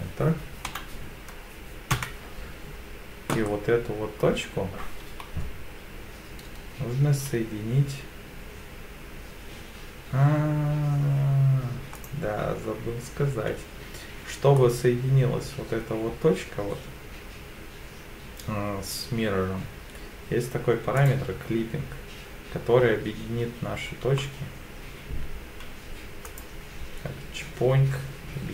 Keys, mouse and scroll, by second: 0.7 Insert, 1.9 KP_7, 3.5 middle click, 5.0 g, 7.1 x, 12.0 click, 14.6-15.8 middle drag, 21.0 click, 25.0 g, 25.0 x, 26.3 click.